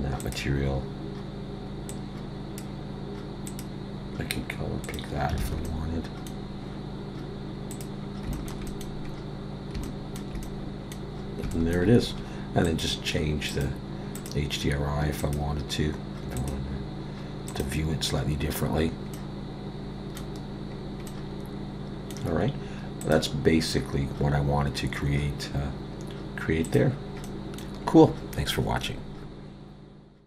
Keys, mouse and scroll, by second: 0.2 click, 0.2 scroll down 2, 5.4 alt+a, 5.7 middle click, 7.7 click, 8.3 shift+middle click, 8.7 middle click, 9.1 scroll up 3, 9.8 shift+middle click, 10.4 middle click, 11.2 scroll down 1, 11.5 shift+middle click, 12.6 click, 13.5 click, 19.2 middle click, 20.7 scroll down 2, 21.1 middle click, 23.0 click, 26.7 click, 27.2 middle click.